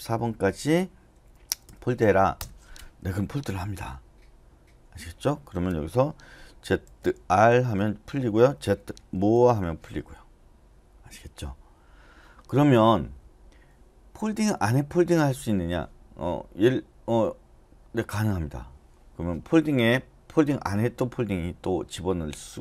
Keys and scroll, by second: 1.2-1.9 typing, 2.4 Return, 6.6-7.3 typing, 8.5-9.1 typing.